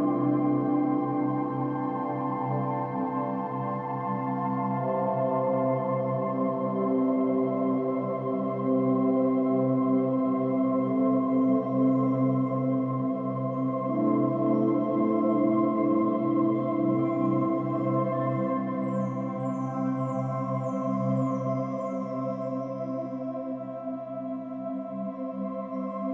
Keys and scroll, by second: 3.4 space, 3.8 space, 3.8 space, 10.4 typing, 11.0 Return.